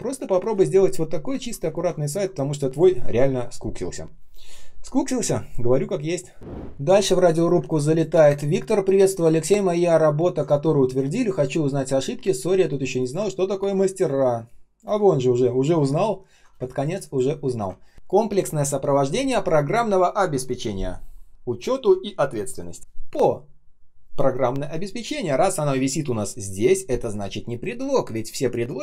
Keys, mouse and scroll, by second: 0.3 ctrl+ц, 7.5 space, 8.0 space, 8.0 space, 13.2-13.9 ctrl+scroll down 1, 13.9 ctrl+shift+3, 14.2 space, 14.7 space, 14.9 ctrl+scroll up 1, 16.0-16.5 ctrl+scroll down 1, 16.5 space, 17.0 space, 17.4 ctrl+shift+3, 17.7 ctrl+scroll up 1.